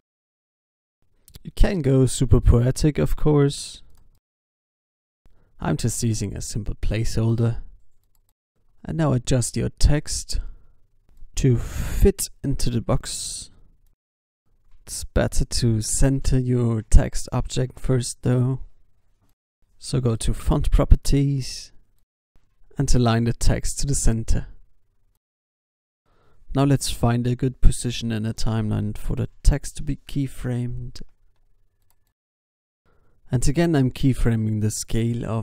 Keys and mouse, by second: 2.3-7.9 typing, 7.5 Tab, 9.0 g, 10.5 g, 11.4 s, 12.2 g, 13.5 g, 21.2 g, 23.6 click, 29.6-32.1 drag, 32.4 s, 33.7-34.9 drag, 35.1 i.